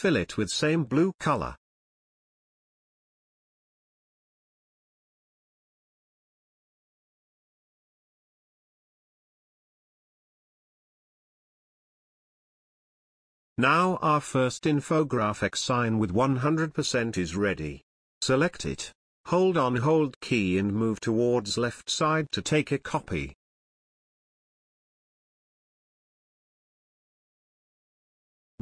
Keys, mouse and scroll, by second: 17.0 space, 17.2 ctrl+click, 18.3 space, 18.5-21.2 ctrl+drag, 21.2-27.3 alt+drag, 28.5 space.